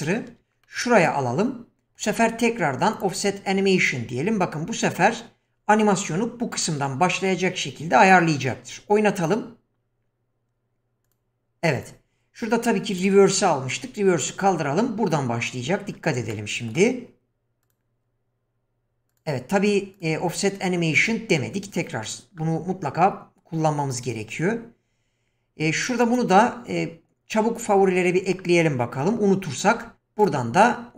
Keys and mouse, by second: 0.6-1.1 middle drag, 2.9 click, 11.0 click, 12.9 click, 16.3-16.7 middle drag, 17.6 click, 19.1 click, 26.0-27.7 right drag, 29.7 q.